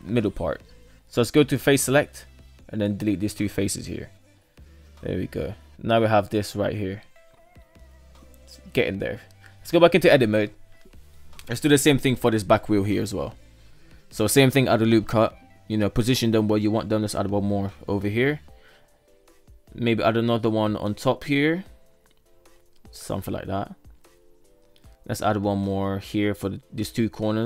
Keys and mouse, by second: 0.7 KP_3, 1.1 right click, 1.5 shift+right click, 2.3 Delete, 3.7 shift+middle click, 3.9 Tab, 4.3 alt+z, 4.7 middle drag, 4.9-6.4 middle drag, 6.8 KP_3, 8.0 alt+z, 9.3-10.0 shift+middle drag, 10.3 shift+middle drag, 12.1 shift+middle click, 12.5 Tab, 13.5 ctrl+r, 16.4 ctrl+r, 19.0 ctrl+r, 24.0 ctrl+r, 26.0 ctrl+r.